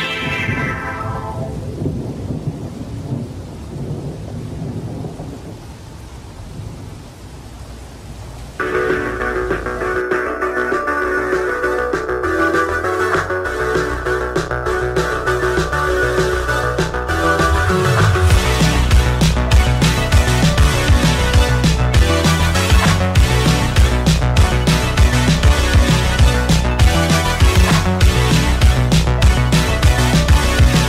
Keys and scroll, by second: 0.7 KP_Multiply, 0.8 Return, 1.2 w, 1.9 w, 2.1 space, 3.3 Insert, 3.7 v, 4.1 w, 4.5 KP_0, 4.6 Tab, 4.7 Return, 5.2 space, 8.4-10.8 typing, 15.9 g, 17.5 g, 19.0 g, 20.4 g, 22.2 g.